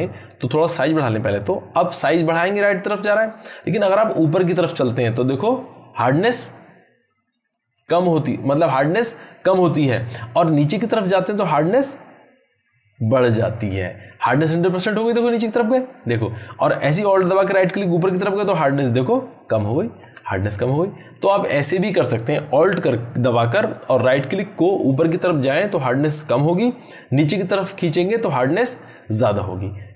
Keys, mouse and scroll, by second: 15.5-16.5 drag, 17.7-20.2 alt+right drag, 20.6-21.2 drag.